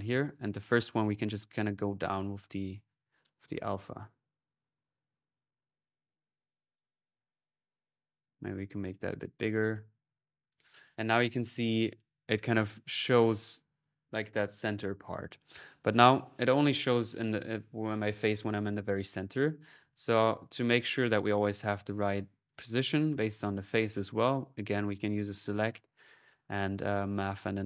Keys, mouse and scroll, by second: 0.1 click, 1.1-7.0 drag, 7.1-11.3 drag, 12.9-15.6 drag, 19.1 middle click, 19.9 middle click, 20.4-21.7 drag, 21.8 click, 22.3-24.4 drag, 23.4-24.2 typing, 24.5-25.9 drag, 24.9 middle click, 26.1-27.4 drag, 26.8 middle click, 27.4 right click.